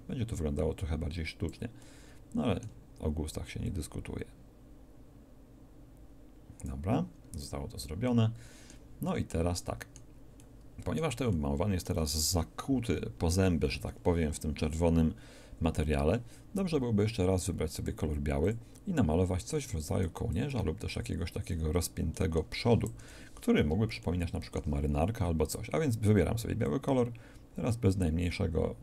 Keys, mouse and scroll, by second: 3.7-5.8 drag, 17.7-20.4 drag, 22.9 KP_1.